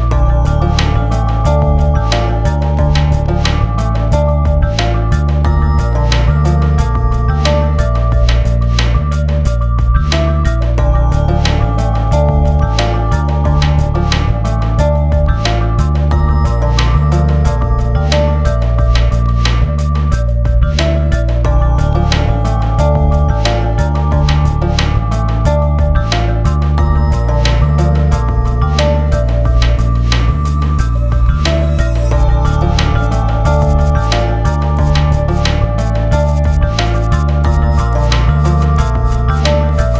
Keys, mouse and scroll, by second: 13.2 ctrl+space, 14.3 click, 18.6-23.5 drag, 23.5 F12, 25.7 click, 30.7 click, 32.7 right click, 33.4 click, 34.9 click, 35.7 Down, 37.6 click, 39.0 e.